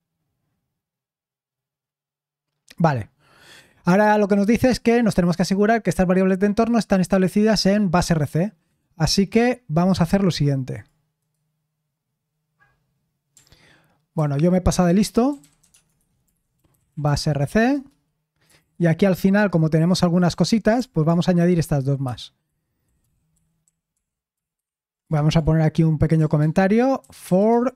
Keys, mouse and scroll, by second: 9.1-11.2 drag, 11.2 middle click, 11.2-14.1 right drag, 14.1 ctrl+c, 15.0-27.7 typing, 22.0 Escape.